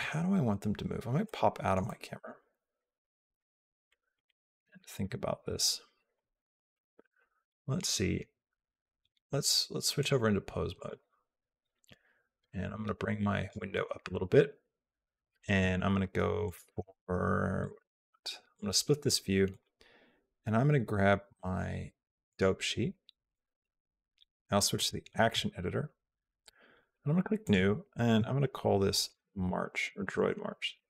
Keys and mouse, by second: 1.2 shift+middle click, 1.7 middle click, 2.6-4.9 shift+middle drag, 10.2 click, 12.3 click, 16.3 click, 18.4 click, 19.5 click, 23.3 click, 26.6 click, 27.4 click, 29.8 BackSpace, 30.0 BackSpace.